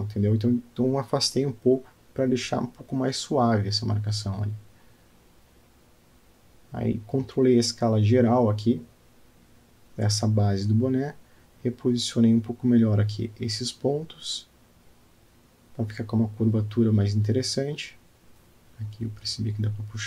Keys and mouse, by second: 0.1 Tab, 0.5-2.3 middle drag, 3.2 s, 6.6-7.4 alt+middle drag, 8.2 s, 10.6 Tab, 12.4 click, 13.7 g, 15.6 g, 16.9 click, 17.2 g, 18.4 Tab, 19.2 Tab.